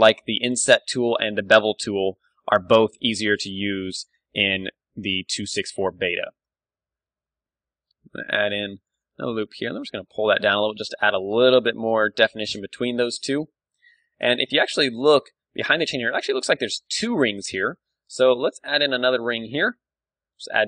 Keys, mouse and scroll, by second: 0.2-1.8 drag, 0.4 a, 1.0 Tab, 1.8-3.8 middle drag, 3.6 ctrl+w, 4.8 middle click, 5.6 Tab, 7.6 ctrl+r, 9.0-10.2 drag, 9.3 g, 10.5 Tab, 10.6 middle click, 11.0-12.0 drag, 12.0-14.0 middle drag, 17.5 Tab, 17.7-19.1 middle drag, 18.0 a, 18.5 ctrl+r, 19.1-20.6 drag, 19.9 alt+s.